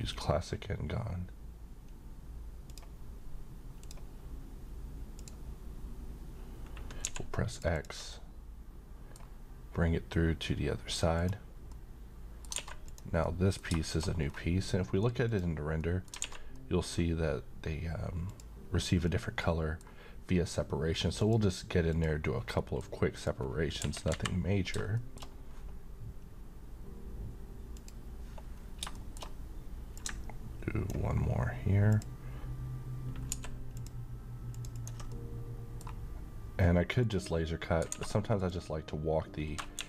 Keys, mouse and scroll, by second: 2.6 ctrl+click, 7.0 ctrl+x, 7.5 ctrl+click, 8.1-9.4 middle drag, 11.1 click, 11.7-12.6 middle click, 12.6 a, 12.9 click, 13.2-14.1 middle click, 14.2 scroll down 1, 15.2 click, 15.8 middle click, 16.2 alt+a, 16.5-17.1 middle drag, 18.3 click, 19.0-20.0 middle drag, 21.2 click, 22.6 middle click, 23.2 click, 25.0 middle click, 27.7 click, 28.6 scroll up 1, 29.0 middle click, 30.2-30.9 drag, 33.4 ctrl+x, 33.7 ctrl+click, 35.1-36.1 middle drag, 37.0 click, 37.9 a, 38.3 click, 38.4 click.